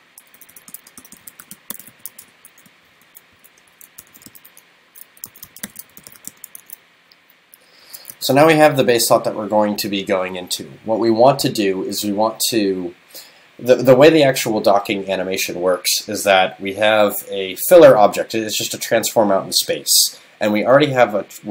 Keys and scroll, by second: 3.7 super+Left, 8.2 super+s.